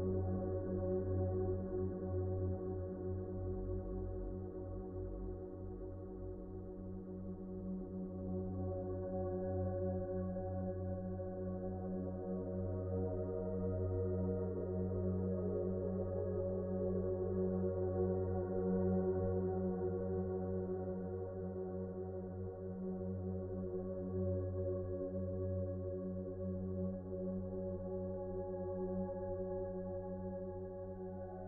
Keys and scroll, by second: 5.2 c.